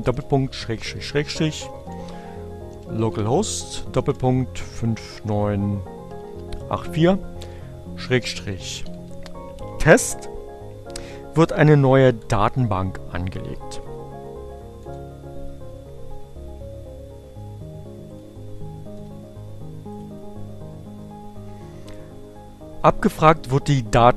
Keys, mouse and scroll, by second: 1.0-4.6 typing, 5.9-8.8 typing, 11.6 Return, 12.2 Up, 17.8 click, 18.0 Return, 19.6 click.